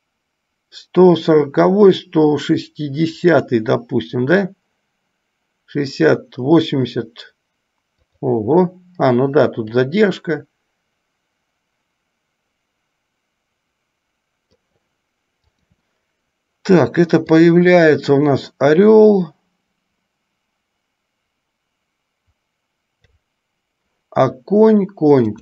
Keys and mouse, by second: 3.6 click, 8.3 click, 10.1-14.8 drag, 17.6-23.3 drag.